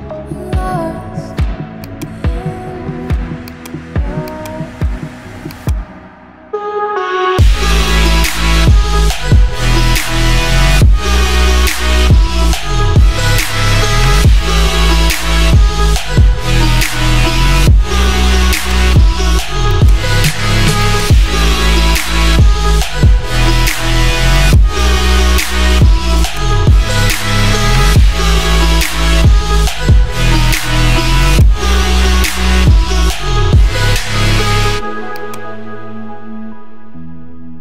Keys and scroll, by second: 3.7 Delete.